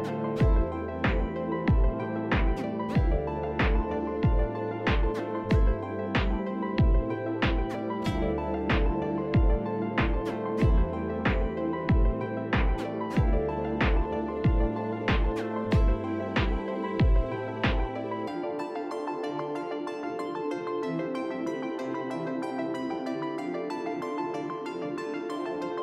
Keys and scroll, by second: 1.9 alt+x, 7.7 alt+x, 8.4 2, 13.3 e, 15.7 ctrl+z, 16.3 e, 16.8 q, 18.8 t, 19.7 F4, 21.1 F4.